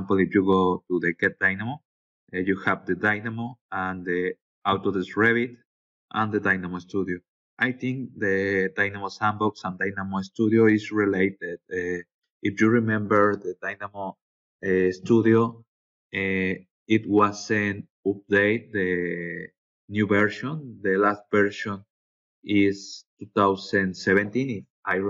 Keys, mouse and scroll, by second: 0.4 click, 2.5-3.3 scroll down 3, 3.4-3.8 scroll up 2, 4.1 scroll down 2, 4.5 scroll up 2, 5.0-5.8 scroll down 6, 6.5 scroll down 2, 7.1-7.9 scroll up 4, 8.3-8.8 scroll up 4, 11.2 scroll down 2, 18.0 scroll down 2.